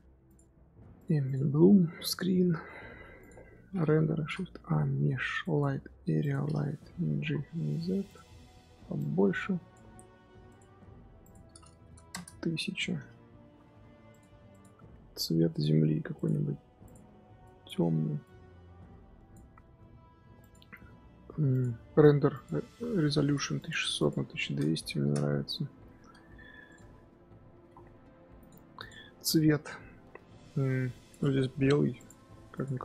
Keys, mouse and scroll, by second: 0.9 click, 1.2 click, 2.0 click, 3.1 click, 6.2 shift+a, 7.0 g, 12.0 KP_0, 13.3 g, 14.5 click, 16.2-17.3 drag, 20.5 click, 23.5 KP_0, 26.7 click, 27.5 g, 28.8 click, 32.6-32.8 drag.